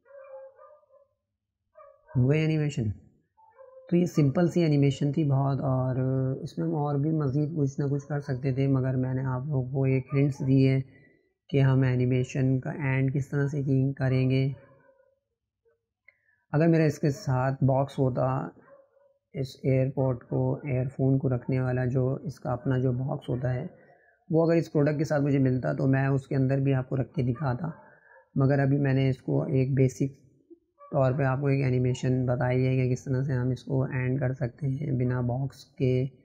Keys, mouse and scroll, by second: 0.0-3.0 drag, 5.7 click, 9.7-23.3 drag, 25.0-29.2 drag, 29.2-31.7 right drag, 31.7 click.